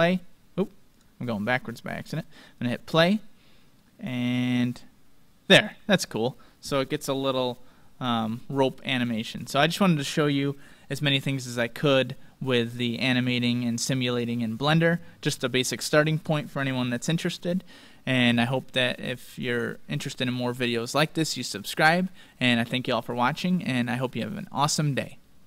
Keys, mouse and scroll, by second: 8.9-11.3 drag, 12.3-13.1 scroll down 1, 12.3-17.8 middle drag.